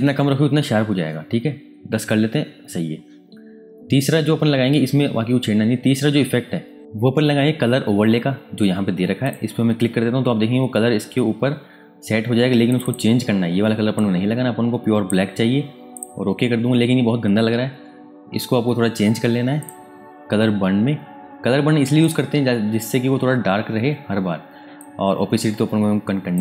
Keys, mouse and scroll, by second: 0.9-3.0 scroll up 1, 6.8 Tab, 9.2 click, 12.7 click, 19.5 click, 22.0 click, 24.7 click.